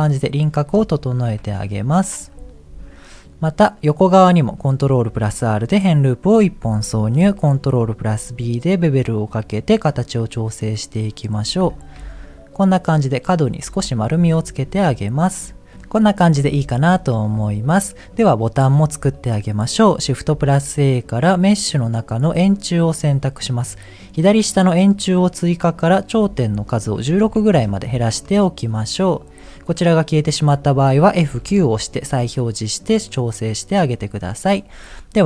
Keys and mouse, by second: 1.3 KP_1, 4.8 ctrl+r, 7.7 ctrl+b, 11.9 Tab, 13.6 Tab, 14.4 shift+click, 16.8 shift+middle click, 24.9 click, 26.1-27.7 drag, 30.2 click, 31.4 F9.